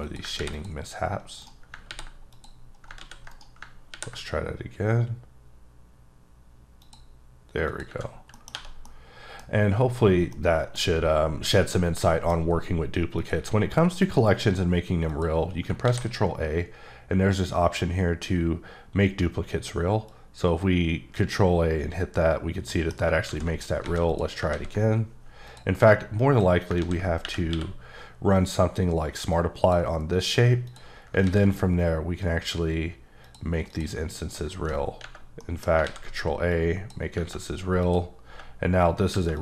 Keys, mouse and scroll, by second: 0.0 click, 0.3 ctrl+r, 0.5 ctrl+click, 1.4 right click, 1.9 r, 2.3 click, 3.0 ctrl+z, 3.3 ctrl+right click, 3.9 ctrl+r, 6.8 click, 7.7 click, 8.1 scroll down 3, 8.3 middle click, 8.4 scroll up 1, 8.5 1, 8.9 middle click, 10.3 middle click, 11.6 middle click, 13.1 click, 14.0 click, 15.1 click, 15.8 ctrl+a, 20.0 click, 22.7 middle click, 23.2 ctrl+z, 24.0 alt+a, 24.1 click, 25.4 click, 26.8 ctrl+a, 27.2 Escape, 27.5 q, 29.3 click, 30.6 click, 31.2 a, 33.2 click, 33.7 click, 35.0 Tab, 35.4 middle click, 35.8 ctrl+a, 36.5 click, 37.8 click, 39.3 click.